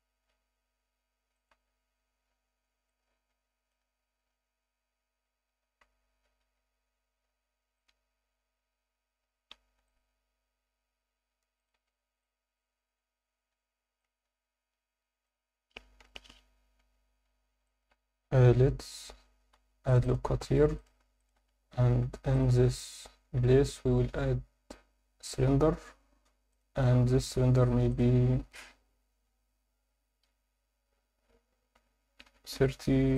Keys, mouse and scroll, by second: 1.4 click, 1.5 z, 2.0-2.4 scroll down 1, 2.9 alt+middle click, 4.0-4.6 scroll up 2, 6.4 x, 11.6 click, 11.7 Tab, 11.9 scroll down 1, 12.2-13.0 alt+middle drag, 13.3 scroll down 1, 13.5 Tab, 14.0-15.2 alt+middle drag, 16.0 KP_7, 16.7 scroll down 3, 16.8 Tab, 17.6 alt+shift+middle click, 18.3 Tab, 19.5 ctrl+r, 20.4 1, 20.8 click, 21.2 shift+click, 21.7 shift+s, 22.8 Tab, 23.4 shift+a, 26.5 click, 27.9-33.1 drag.